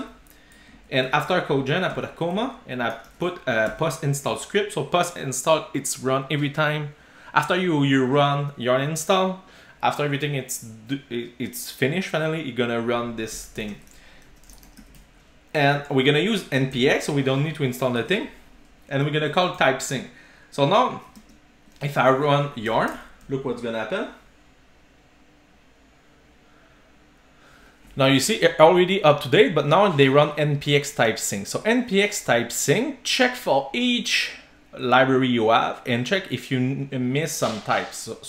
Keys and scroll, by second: 3.8 Return, 18.0 super+s.